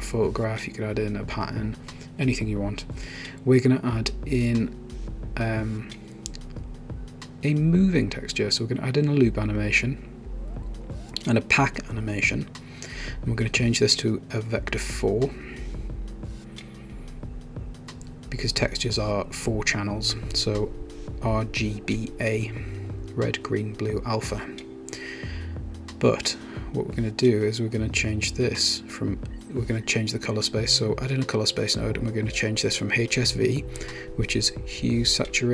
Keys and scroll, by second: 0.7 BackSpace, 3.5-4.8 typing, 6.0-6.7 typing, 11.0-12.9 typing, 19.2 1, 19.5 Tab, 20.3 Tab, 20.3 1, 21.3 Tab, 27.0-28.4 typing.